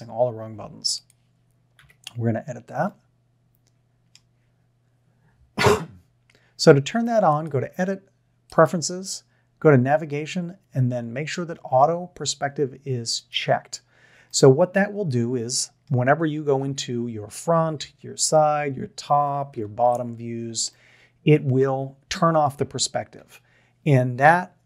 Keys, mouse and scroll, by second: 0.9 click, 1.8 KP_1, 2.9-3.7 middle drag, 14.3-15.8 middle drag, 16.6 KP_1, 17.8 KP_3, 18.4 KP_7, 19.5 ctrl+KP_7, 23.2 KP_3.